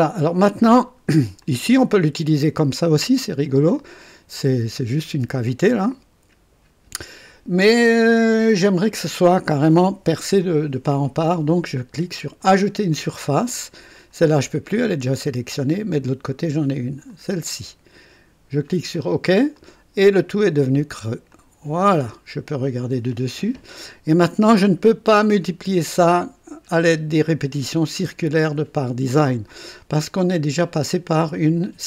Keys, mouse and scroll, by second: 0.7-1.1 scroll up 2, 1.4-5.2 drag, 5.7-7.1 drag, 12.3 click, 13.7 click, 15.1-16.2 drag, 17.0 click, 18.9 click, 19.5-20.7 drag, 21.3 click, 22.1-23.1 right drag.